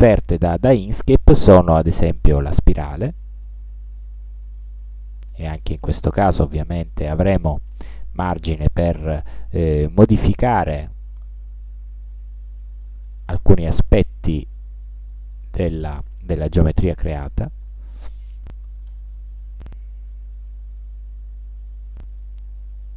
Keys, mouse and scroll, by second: 2.2 click, 3.1-4.9 drag, 6.2-9.4 drag, 10.9-13.1 drag, 13.2 click, 14.5 ctrl+scroll down 2, 14.8 ctrl+scroll up 2.